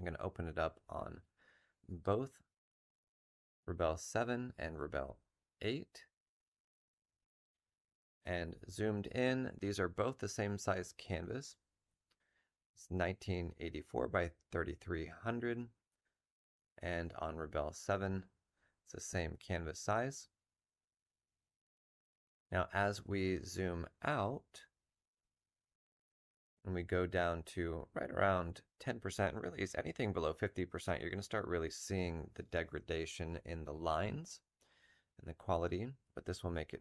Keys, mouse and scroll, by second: 0.1 F7, 1.3 double click, 2.3 F7, 10.5 Tab, 17.3 Tab, 20.5 Tab, 36.1 s.